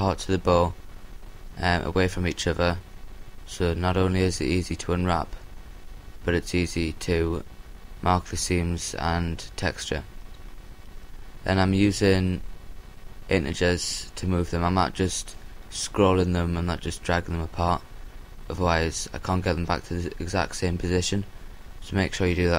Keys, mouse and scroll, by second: 0.4 g, 6.1 a, 6.7 l, 8.2 g, 10.9-12.4 drag, 11.2 a, 12.1 l, 13.6 g, 15.4-16.6 drag, 16.3-18.1 middle drag, 19.6 a, 21.1 l.